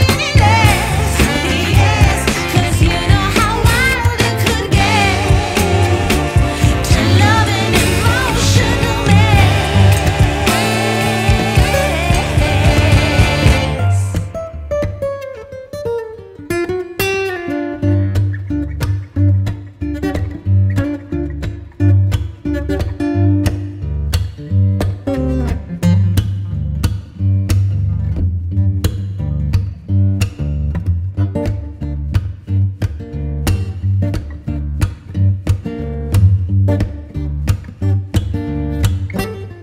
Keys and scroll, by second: 10.9 alt+c, 11.0 alt+w, 11.3 p, 12.2 space, 17.4 F4, 22.0 space, 26.1 ctrl+r, 31.9 Escape.